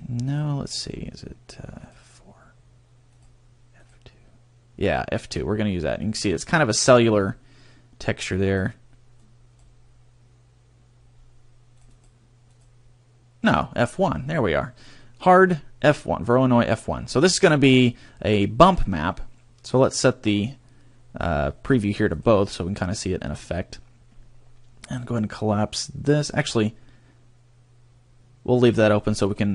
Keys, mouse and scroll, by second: 0.2 click, 3.0 click, 5.8-6.2 scroll up 2, 7.2-8.4 scroll down 3, 8.4 click, 11.7 click, 18.7-19.6 scroll up 2, 19.6-22.0 scroll up 1, 22.1 click, 23.2-25.0 scroll down 4, 25.0 scroll down 1.